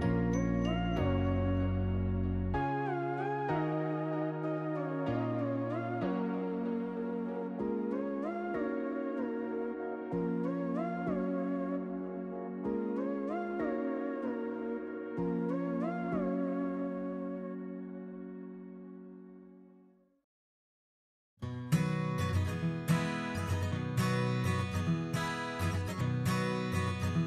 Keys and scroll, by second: 14.4 Delete, 18.9-20.5 typing.